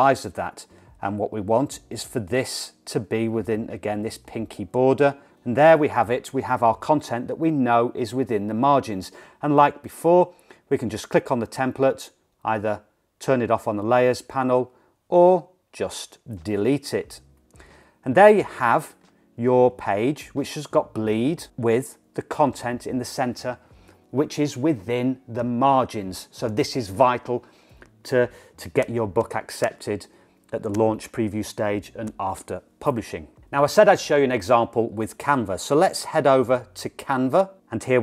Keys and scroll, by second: 16.8 BackSpace.